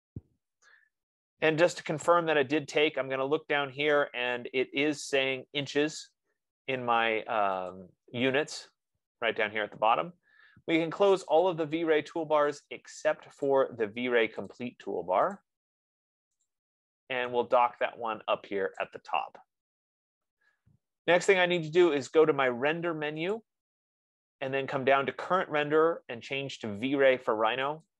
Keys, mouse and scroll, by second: 9.2 click, 11.8 click, 12.8 click, 13.9 click, 14.9 click, 15.7 click, 16.9 click, 20.2 click, 23.7 click.